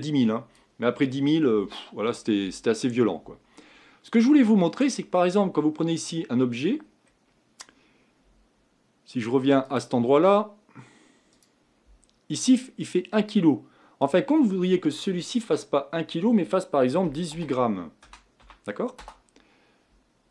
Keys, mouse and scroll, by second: 5.0 click, 5.5-6.9 scroll up 5, 6.9-8.0 scroll down 2, 19.0-20.3 drag.